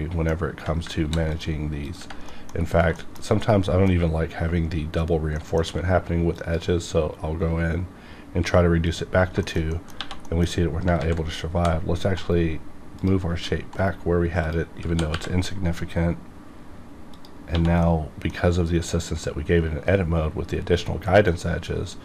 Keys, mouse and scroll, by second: 1.0 ctrl+r, 1.3 click, 2.3 middle click, 2.5-2.8 scroll up 4, 2.9 shift+middle click, 3.6 middle click, 4.0-5.3 scroll up 1, 5.3 middle click, 5.6 q, 6.3 click, 6.9 scroll down 1, 8.8 click, 9.1 scroll down 1, 9.4 shift+middle click, 9.7 middle click, 10.0 1, 10.2 middle click, 11.0 ctrl+z, 11.3 scroll up 1, 11.6 g, 12.2 right click, 13.0 click, 13.3 g, 13.8 right click, 14.4 click, 15.1 y, 17.1 click, 17.5 1, 17.8-20.6 middle drag.